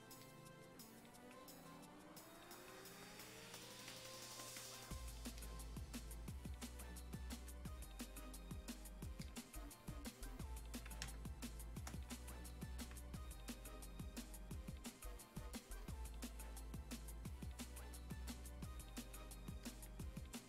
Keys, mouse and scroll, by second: 11.0 space, 11.4 click, 11.5 space, 12.0-20.4 drag.